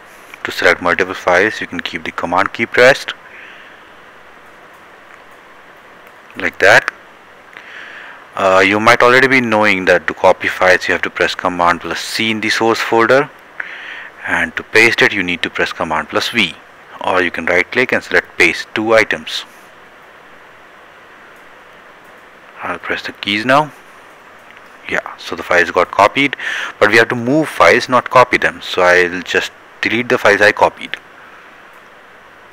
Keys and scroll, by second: 10.4 c, 22.0 v.